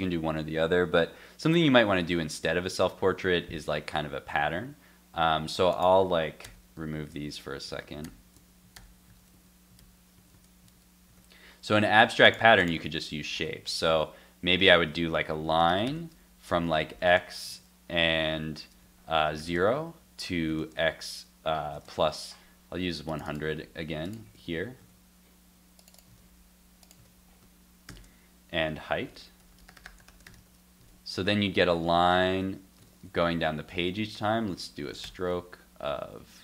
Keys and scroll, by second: 2.7 super+Tab, 3.8 super+s, 6.4 super+/, 8.0 super+/, 8.8 super+/, 9.1 super+z, 9.8 super+/, 10.7 super+/, 13.9 super+s, 17.5 super+s, 24.3 super+v, 24.8 super+z, 26.1 super+c, 27.0 super+v, 30.4 super+s, 30.8 super+Tab, 31.2 super+r, 32.3 shift+super+r, 32.8 super+Tab.